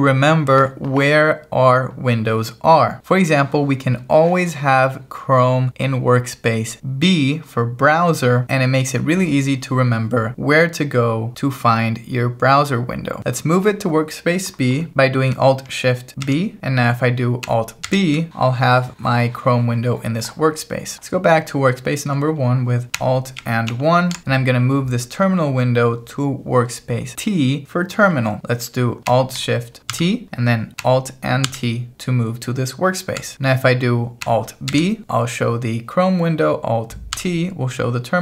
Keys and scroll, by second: 16.3 alt+shift+b, 17.9 alt+b, 23.7 alt+1, 29.9 alt+shift+t, 31.5 alt+t, 34.7 alt+b, 37.1 alt+t.